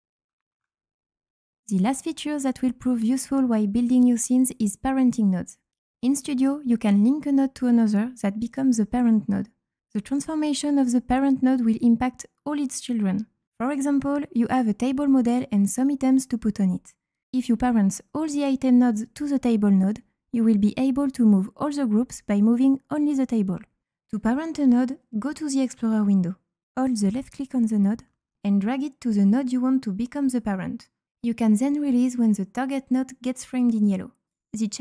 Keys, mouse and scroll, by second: 0.2-0.7 scroll up 4, 24.7-26.2 right drag, 25.1 d, 25.7 d, 27.7 click, 29.1-34.2 drag.